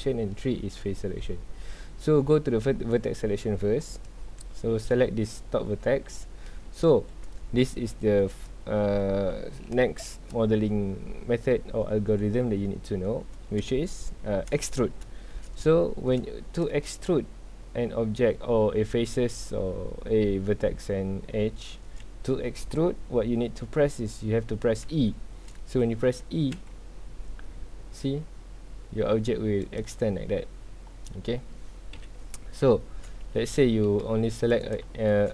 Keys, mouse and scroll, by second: 3.4-4.0 scroll up 2, 4.0 click, 6.1 scroll down 2, 6.3 scroll up 1, 6.4 middle click, 6.8 z, 7.1 scroll up 1, 8.0 3, 8.3 click, 9.7-11.9 shift+middle drag, 11.9-12.5 scroll up 2, 12.5-13.0 scroll down 2, 13.0 shift+middle click, 13.4-13.8 scroll up 2, 13.8-15.5 shift+middle drag, 15.5 scroll down 2, 15.7 middle click, 16.7-18.1 scroll up 2, 18.1-19.0 scroll down 2, 19.0-21.0 scroll up 2, 21.0-21.8 scroll up 1, 21.8-22.1 scroll down 2, 22.1-23.3 shift+middle drag, 23.3-25.1 scroll up 2, 25.1-26.5 shift+middle drag, 26.5 e, 29.8 click, 30.0 scroll down 2, 30.1 middle click, 30.9 scroll up 2, 31.0 middle click, 31.9 KP_1, 32.8 shift+middle click, 33.4 ctrl+z, 33.7 middle click, 34.0 1, 34.5 click, 35.0 shift+middle click.